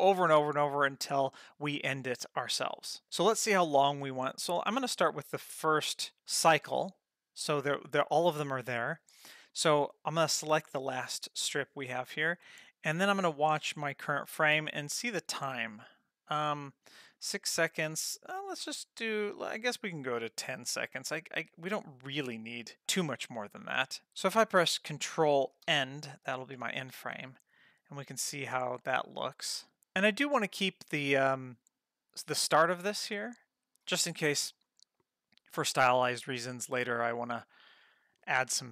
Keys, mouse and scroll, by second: 4.1-6.1 drag, 6.1 Page_Down, 11.0 click, 14.8-22.8 drag, 25.7 ctrl+End, 26.8 space.